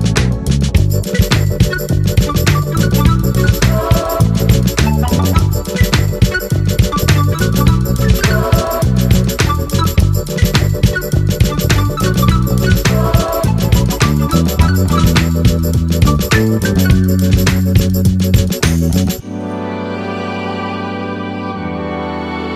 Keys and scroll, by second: 5.1 ctrl+z.